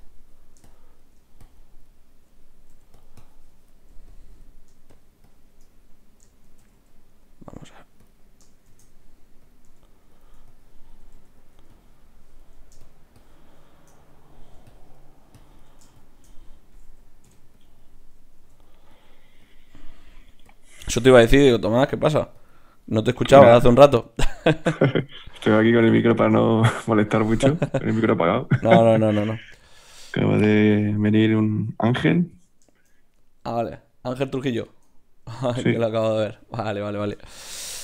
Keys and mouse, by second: 2.7 f, 7.1 shift+c, 7.1 f, 8.7 shift+f, 9.6 f, 10.5-26.4 drag, 11.1 f, 16.4-18.4 middle drag, 16.4-18.4 right drag, 17.2 k, 18.4 f, 19.9-21.6 middle drag, 19.9-21.6 right drag, 22.8-26.4 middle drag, 22.8-28.1 right drag, 28.0-30.4 middle drag, 28.1 click, 31.5-33.3 drag.